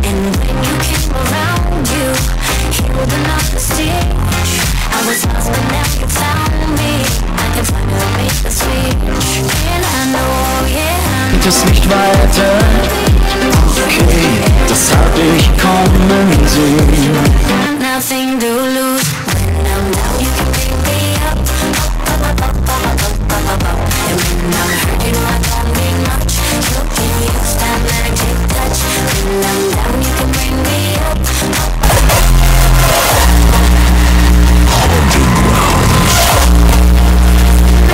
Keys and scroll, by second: 17.7 Page_Down.